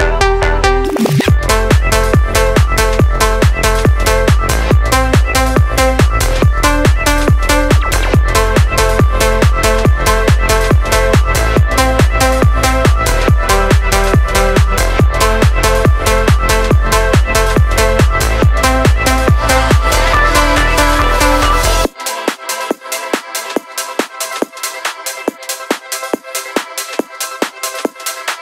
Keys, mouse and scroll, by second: 0.7-1.7 drag, 2.7 click, 3.4 click, 4.5 click, 16.6-17.1 scroll up 1, 21.1 click, 25.0 click, 26.0 click, 26.9 drag.